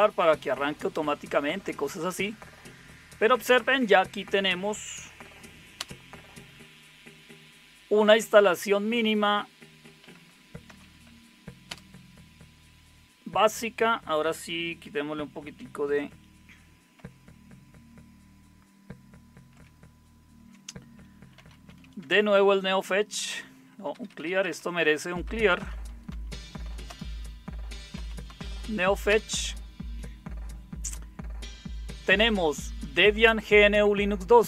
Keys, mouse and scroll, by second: 5.7 super+Return, 9.8-11.2 typing, 11.6 Return, 16.0 ctrl+-, 16.9 ctrl+-, 19.5 ctrl+-, 21.1-22.2 typing, 23.9-29.1 typing.